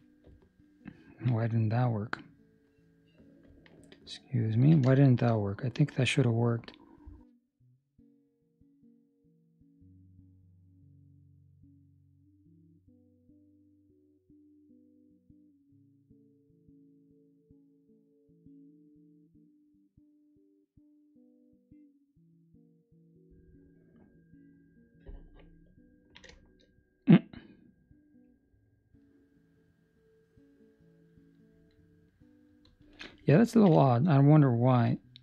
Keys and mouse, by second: 0.3 ctrl+middle click, 3.6 ctrl+middle click, 4.8 shift+middle click, 5.4 middle click, 26.4 shift+middle click, 28.6 click, 33.5 ctrl+middle click, 34.9 shift+middle click, 34.9 click.